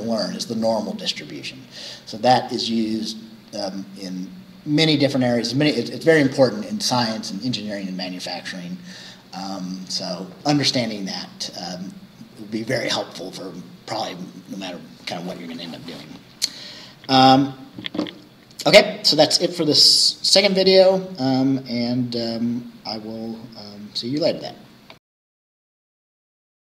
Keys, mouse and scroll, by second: 25.0 middle click, 25.8 click.